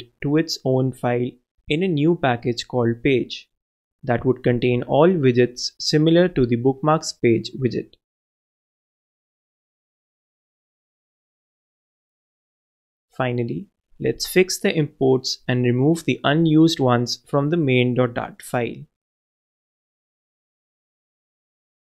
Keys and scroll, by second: 4.6-5.9 typing, 9.5 super+Left, 10.1 shift+super+x, 10.3 super+BackSpace, 11.1 super+Right, 11.2 super+Return, 12.1 super+Return, 12.1 super+v, 13.9 super+Return, 13.9 super+a, 14.0 alt+super+l, 14.7 super+w, 15.9 super+w, 17.6 super+BackSpace, 18.3 alt+super+Return.